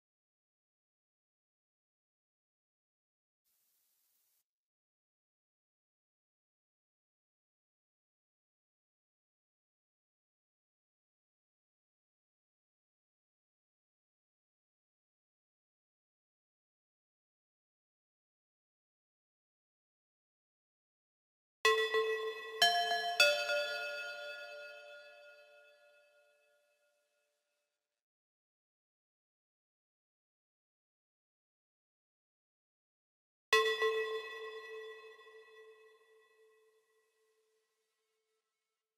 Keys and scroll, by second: 10.4 ctrl+x.